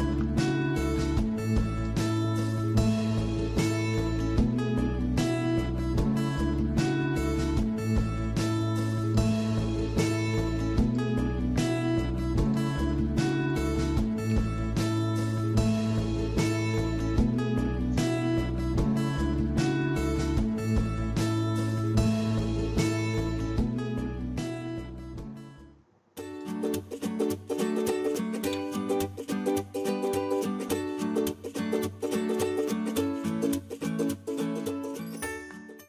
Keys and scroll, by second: 0.8 Escape, 11.4 Escape, 14.1 Escape.